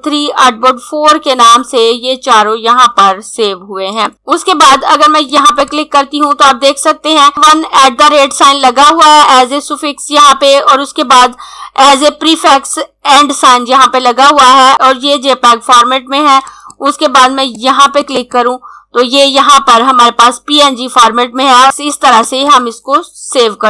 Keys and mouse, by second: 3.7 click, 16.5 click, 22.2 click.